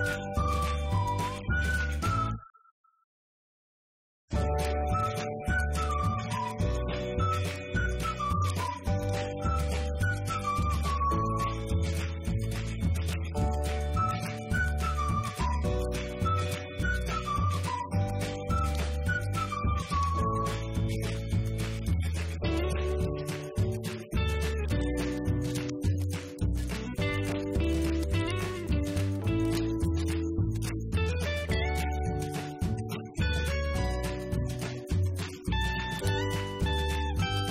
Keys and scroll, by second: 1.9 1, 2.7 0, 2.9 Return, 3.4 Up, 5.1 Left, 8.9 F2, 11.5 -, 12.1 Right, 14.5 Return, 22.0-22.9 typing, 23.1 Return, 24.2 Up, 25.3 ctrl+space, 25.9 ctrl+-, 26.8 Left, 27.6 Down, 27.8 Left, 28.5 ctrl+z, 30.4 Right, 31.1 ctrl+space, 31.3 ctrl+-, 32.0 Left.